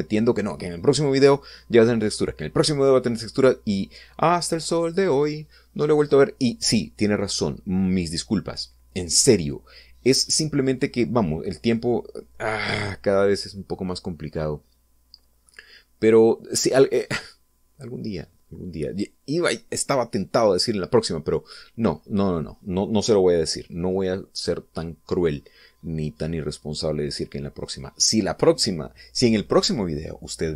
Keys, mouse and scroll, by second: 14.9 scroll down 1, 15.4-16.8 middle drag, 17.0-17.3 scroll up 2, 17.9 scroll down 2, 18.5-20.3 middle drag, 22.2-23.6 scroll down 2, 23.6-23.9 scroll down 1, 24.1-26.5 middle drag, 26.6-26.9 scroll up 2, 28.0 scroll down 2.